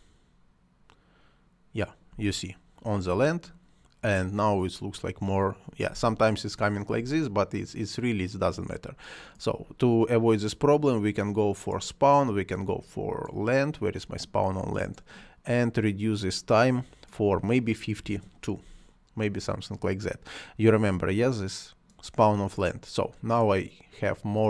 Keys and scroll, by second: 2.0 space, 5.8 space, 17.8 2, 17.9 Return.